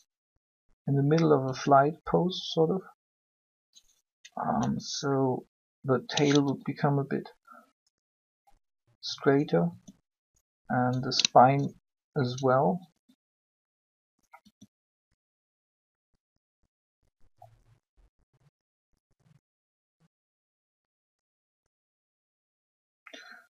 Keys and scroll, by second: 1.4 r, 6.4 ctrl+r, 9.6 r, 12.9 shift+r, 14.4 r.